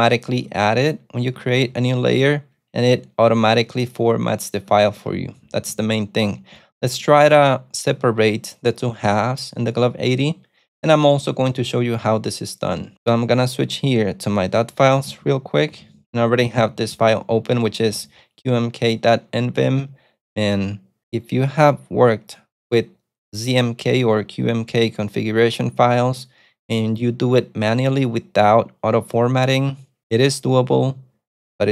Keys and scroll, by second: 1.4 ctrl+d, 1.5 ctrl+d, 2.9 ctrl+u, 3.5 ctrl+u, 3.7 ctrl+u, 4.8 ctrl+d, 5.4 k, 6.5-7.1 typing, 15.2 ctrl+super+F3, 15.7-18.4 typing.